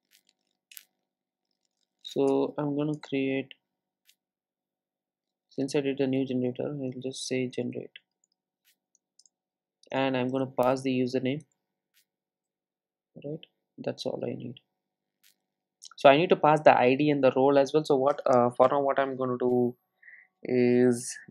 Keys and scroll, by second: 2.9 super+e, 11.5 Return.